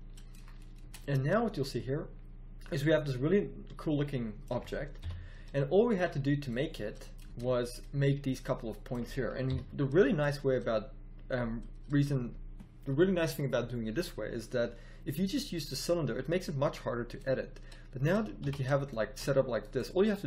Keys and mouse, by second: 0.8 Tab, 4.9 KP_1, 7.2 Tab, 9.4 KP_1, 17.6 middle click, 18.4 z.